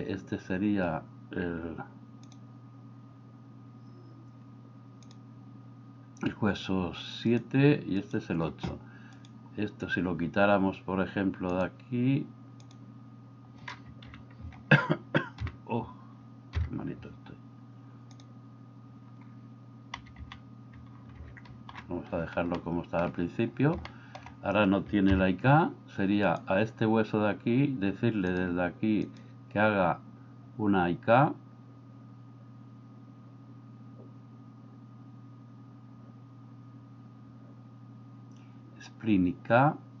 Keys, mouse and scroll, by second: 5.1 click, 12.6 click, 14.1 KP_1, 15.4 KP_1, 16.6 KP_3, 18.3 click, 20.0 a, 20.3 a, 21.3 alt+r, 21.5 alt+g, 22.7-23.0 shift+middle drag, 23.9 middle click, 25.1 KP_3, 29.0-40.0 drag.